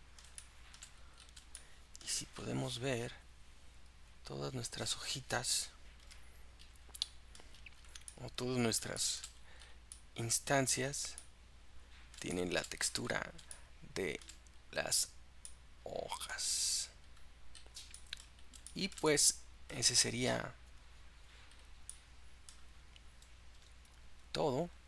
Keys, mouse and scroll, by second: 1.0-1.4 scroll down 7, 1.6 shift+middle click, 2.4-3.2 scroll up 18, 4.4 click, 6.1 KP_Decimal, 6.6-7.1 scroll down 3, 7.1 middle click, 7.6-8.1 scroll down 4, 8.1-9.4 middle drag, 9.4-10.0 scroll down 6, 10.0 middle click, 10.9-11.2 scroll down 1, 11.2-12.8 middle drag, 12.8-13.6 scroll up 6, 13.6 shift+middle click, 14.5-15.5 scroll down 2, 15.5-17.1 middle drag, 17.1-18.7 scroll down 4, 18.0 middle click, 18.7-21.6 shift+middle drag, 21.6-21.9 scroll up 2, 21.9-23.6 middle drag, 23.6 space.